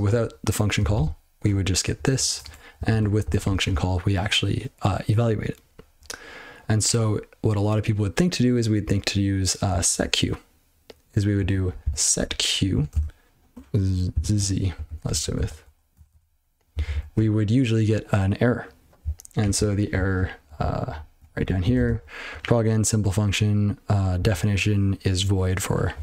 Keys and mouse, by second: 0.9 ctrl+c, 2.1 ctrl+alt+space, 2.4 (, 2.9 ctrl+e, 3.4 ctrl+c, 9.7 click, 9.8 click, 10.1 double click, 11.4 click, 11.5 click, 11.6-13.0 typing, 13.2 ctrl+w, 14.1 z, 14.9 ctrl+g, 15.3 ctrl+f, 16.1 ctrl+c, 16.7 ctrl+n, 16.9 ctrl+n, 19.0-19.4 ctrl+n, 19.5-19.9 ctrl+n, 20.1 ctrl+p, 20.6 ctrl+n, 20.8 ctrl+n, 20.9 ctrl+p, 21.1 ctrl+p, 21.3 ctrl+p, 21.6 ctrl+a, 21.7 ctrl+space, 21.8 ctrl+n, 22.3 ctrl+g, 24.1-26.0 ctrl+p.